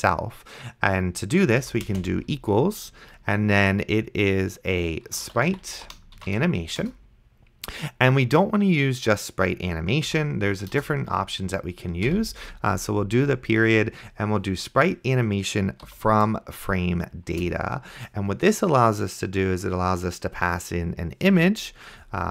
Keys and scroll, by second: 1.7 =, 1.9 space, 5.0-6.3 typing, 6.8 Return, 10.1 Delete, 10.8 BackSpace, 12.1 ., 15.9 Down, 17.3 Return.